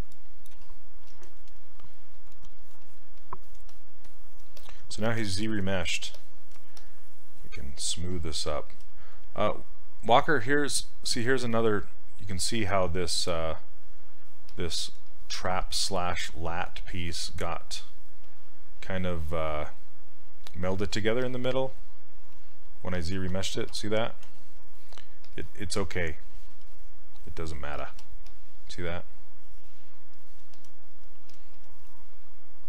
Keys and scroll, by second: 23.8 shift+f, 24.3 shift+f.